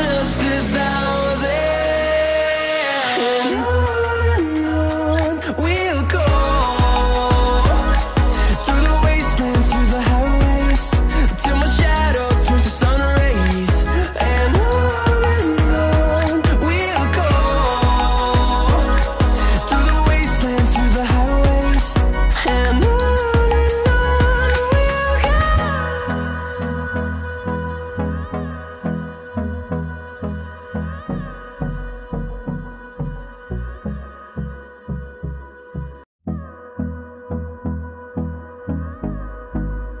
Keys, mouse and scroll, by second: 2.0 click, 2.1-6.2 drag, 7.5-21.7 drag, 21.7 right click, 22.2 click, 22.4 click, 28.3 click, 38.8 scroll up 1, 39.5-40.0 drag.